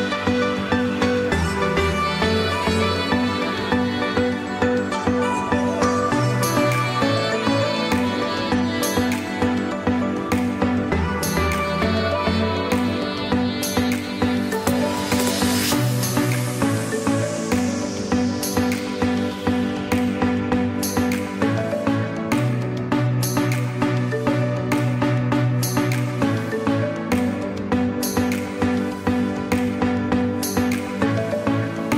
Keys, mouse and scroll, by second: 0.5 space, 0.7 click, 1.1 space, 4.8 g, 9.8 click, 15.0 click, 15.6 click, 22.1 click, 31.6 click.